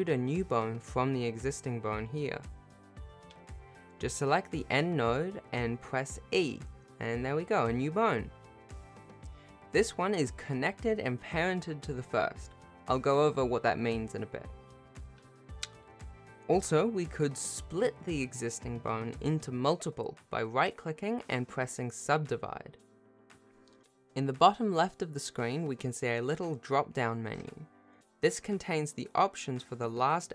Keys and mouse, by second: 1.6 click, 2.6 g, 3.0 shift+a, 3.3 shift+middle click, 4.0 e, 5.8 click, 6.8 g, 11.7 shift+click, 12.1 click, 12.7 g, 14.9 click, 19.7-20.8 drag, 21.8 click, 22.3 shift+middle click, 26.3-29.9 drag, 29.9-30.3 right drag.